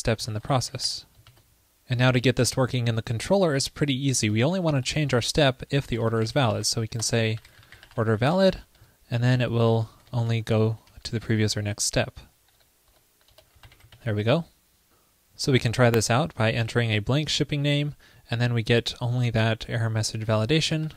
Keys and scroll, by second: 1.3 super+s, 7.1 alt+BackSpace, 9.6 super+Left, 11.8 super+], 14.3 super+s.